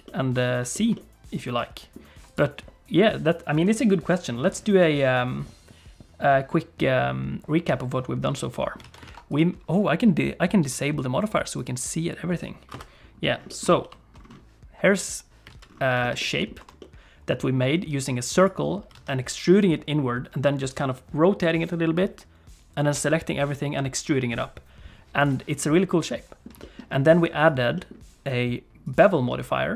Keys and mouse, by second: 0.0 middle click, 0.7 shift+middle click, 0.9-1.9 middle drag, 2.2 click, 8.4 click, 8.8 alt+a, 9.1 ctrl+s, 9.3 click, 11.2 click, 12.7 KP_Decimal, 13.5 middle click, 13.8 shift+h, 15.0 click, 15.5 alt+a, 16.0 shift+middle click, 16.2 middle click, 16.6 t, 16.8 middle click, 18.4 click, 18.9 alt+a, 25.2 click, 25.7 middle click, 26.6 shift+click, 27.4 click, 27.7 middle click, 28.8 click, 29.3 middle click.